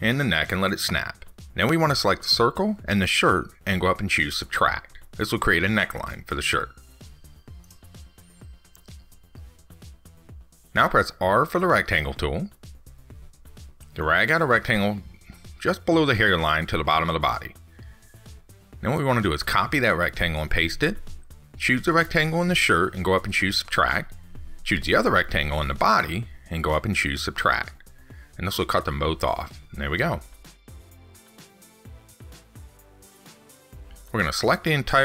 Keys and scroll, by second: 20.6 ctrl+c.